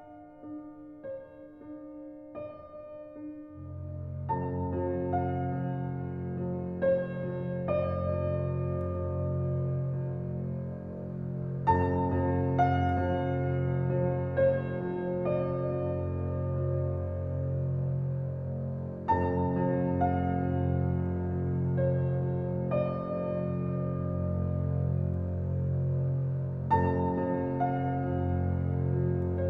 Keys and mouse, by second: 2.2 g, 2.8 z, 7.2 Escape, 7.8-8.8 alt+drag, 9.1 Tab, 9.6-11.8 alt+drag, 10.9 alt+a, 13.7 ctrl+alt+click, 19.5 alt+click, 20.5 alt+a, 20.9-23.9 alt+drag, 24.0-24.7 drag, 25.4-26.4 drag, 27.7 alt+click, 28.0 alt+middle click, 29.0 alt+click.